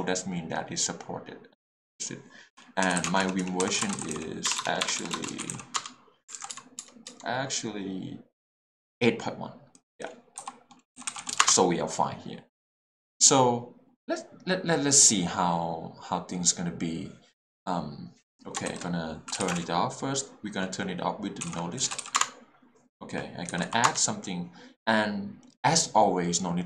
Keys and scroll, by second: 2.8-5.5 typing, 5.7 Return, 6.3 alt+a, 6.5 KP_Divide, 10.4-11.3 typing, 11.4 Return, 19.3 shift+s, 19.3 e, 19.4 t, 19.5 space, 21.4-22.1 typing, 22.2 Return, 23.5 j, 23.6 o, 23.8 Return.